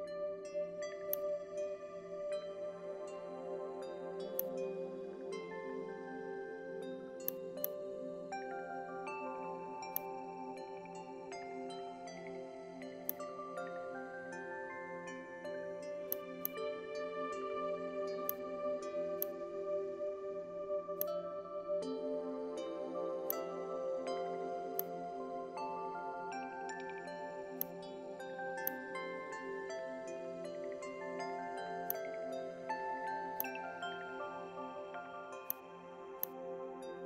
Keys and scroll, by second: 5.0 ctrl+alt+shift+z, 17.7 alt+space.